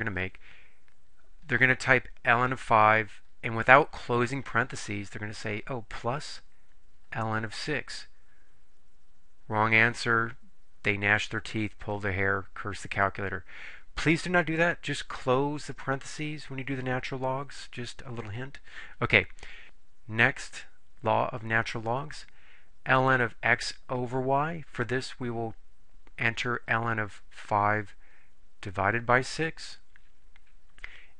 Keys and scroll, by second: 2.7 5, 7.8 6, 8.5 Return, 27.5 5, 29.1 6, 29.9 Return.